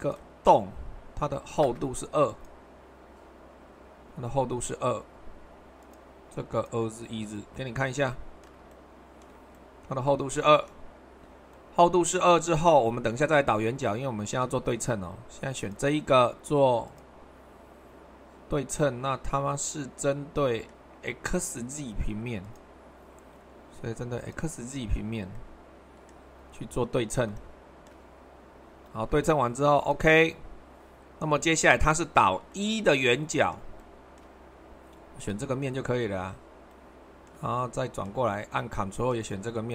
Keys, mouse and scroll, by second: 0.0-1.1 drag, 1.6 2, 16.9-17.9 drag, 18.4-21.6 middle drag, 22.4-23.6 drag, 31.0-36.3 middle drag, 36.7-39.7 middle drag.